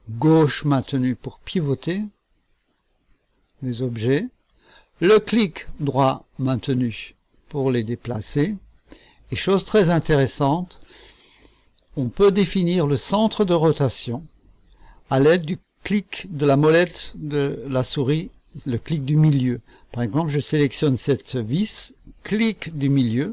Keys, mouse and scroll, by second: 0.2-4.6 drag, 6.7-9.4 right drag, 11.8-13.0 drag, 22.2 middle click.